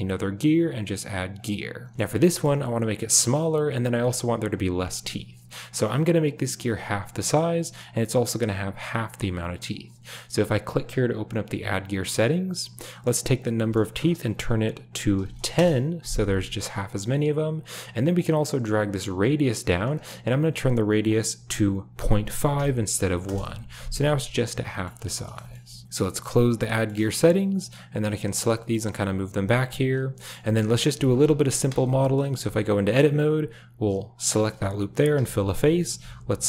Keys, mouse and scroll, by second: 1.4 typing, 2.2 shift+middle drag, 4.0 shift+drag, 10.7 click, 13.4-15.5 drag, 18.2-19.8 drag, 20.2-23.2 drag, 24.7 shift+middle click, 25.4 shift+middle click, 26.7 shift+middle click, 28.1 click, 28.5 g, 30.1 middle drag, 30.4 shift+middle drag, 30.7 click, 31.7 KP_Decimal, 32.3 Tab, 32.6 middle click, 34.2 alt+click, 35.1 f, 35.3 drag, 36.3 alt+drag.